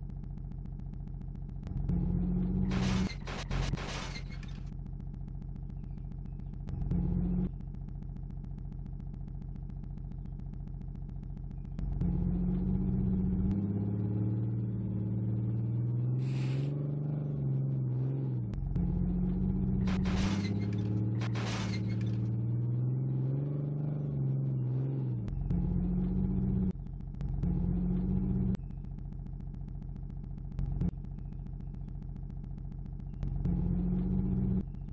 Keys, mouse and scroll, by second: 33.2 r.